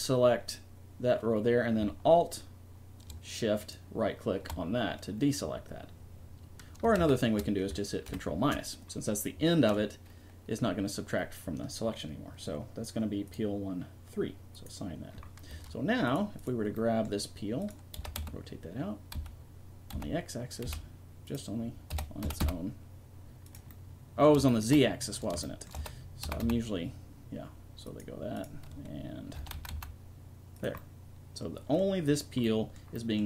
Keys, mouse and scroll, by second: 3.6-5.6 drag, 7.0 ctrl+z, 8.1 ctrl+KP_Subtract, 13.3-15.0 drag, 15.5 Tab, 16.0 right click, 17.8-19.1 right drag, 17.9 r, 21.9 r, 23.8-27.0 middle drag, 25.7 r, 28.9-30.6 right drag, 29.3 r, 30.8-32.7 right drag.